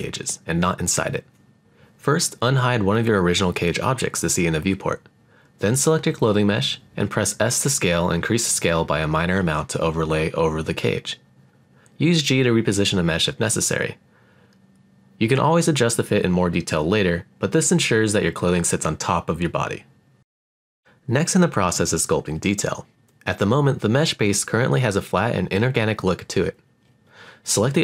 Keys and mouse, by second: 1.4-2.8 middle drag, 4.3-5.5 middle drag, 5.7 s, 6.6 click, 7.0-8.0 middle drag, 8.7 g, 9.0 middle click, 11.3 click, 11.8-14.9 middle drag, 15.4 s, 16.3 click, 16.6-17.7 middle drag, 17.2 g, 20.7 click, 22.2 click, 22.8 click, 23.9-25.9 middle drag.